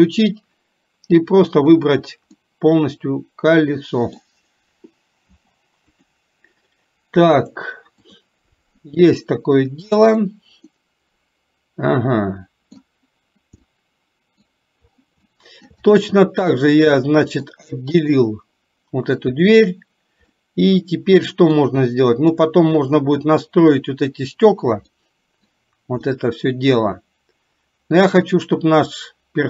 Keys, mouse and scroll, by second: 0.4 click, 2.4-4.3 middle drag, 5.4 p, 7.7-8.3 drag, 10.8-12.9 middle drag, 13.8-14.5 middle drag, 15.4 shift+middle drag, 15.9-16.6 middle drag, 17.0-17.5 middle drag, 18.0 click, 20.4-21.7 middle drag, 22.3 click, 25.1-25.5 middle drag, 26.3-29.4 middle drag.